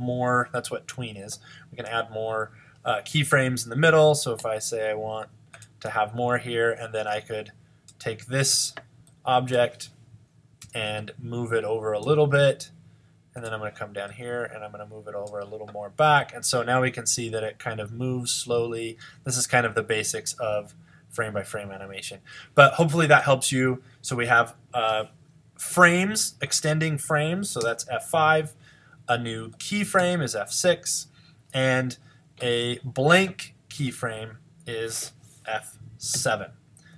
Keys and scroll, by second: 3.2 F6, 26.6 F5, 29.4 F6, 34.9 fn+F7.